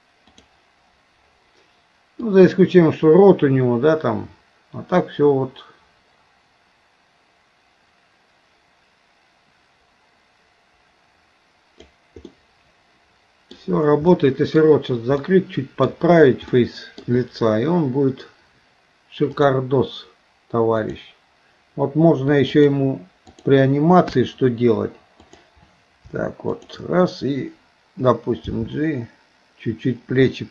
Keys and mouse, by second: 0.4 click, 2.3-11.9 drag, 12.3-13.6 middle drag, 14.1 middle click, 15.3 middle click, 16.6 middle click, 19.4 click, 22.5-23.6 drag, 24.1 KP_1, 25.2 click, 26.5 click, 28.5 g.